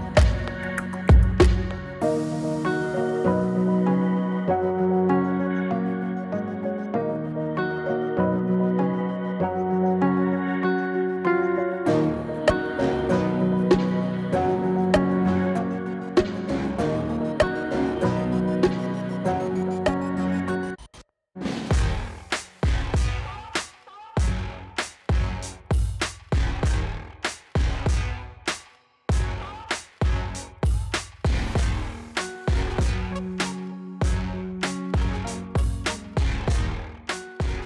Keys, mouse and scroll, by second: 12.6 click, 18.6 space, 21.0 click, 24.1-25.6 drag, 26.1 space, 31.9 space, 33.3-34.0 drag.